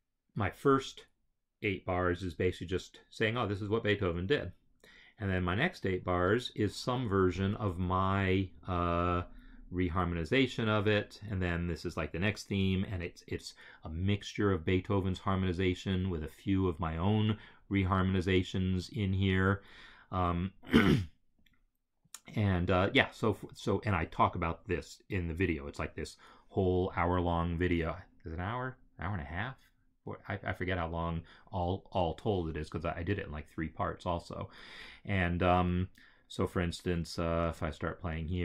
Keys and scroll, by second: 37.4 space.